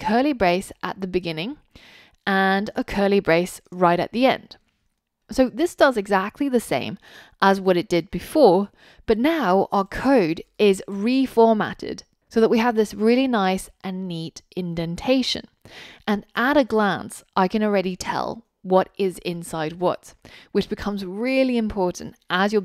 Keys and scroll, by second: 5.1 super+s.